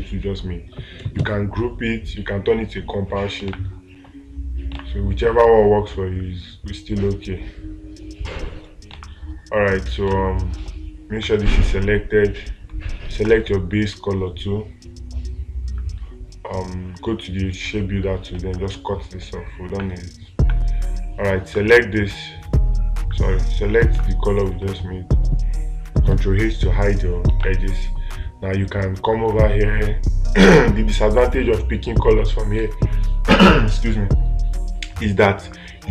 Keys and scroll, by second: 3.9 space, 9.4 space, 24.4 space, 27.8 space.